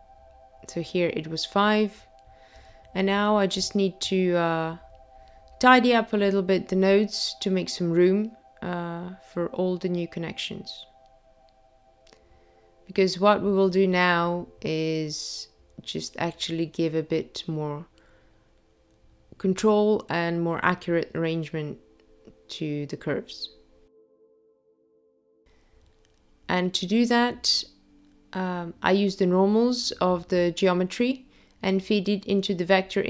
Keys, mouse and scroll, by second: 2.8 click, 7.7 click, 9.9 click, 11.1 click, 12.2 click, 20.1 click, 21.6 click, 22.8 click, 23.6 click, 24.2 click.